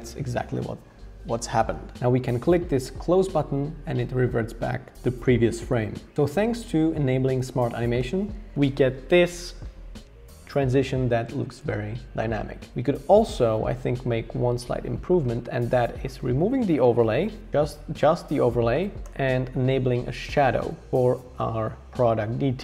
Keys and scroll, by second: 16.6 BackSpace, 17.5 super+z, 19.0 BackSpace, 20.6 BackSpace.